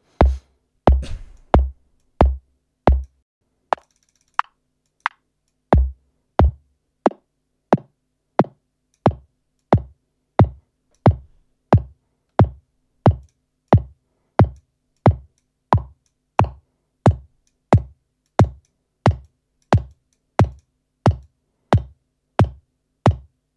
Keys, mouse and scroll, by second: 1.9-3.2 drag, 3.7 click, 4.8 click, 5.4-9.1 drag, 9.5-11.1 drag, 13.1 click, 13.6-14.7 drag, 14.9-15.5 drag, 15.7-16.2 drag, 16.3-17.6 drag, 17.6-18.2 scroll up 1, 18.2-18.8 drag, 19.1 click, 19.8 click, 20.4 click, 21.1-22.5 drag, 23.0-23.5 drag.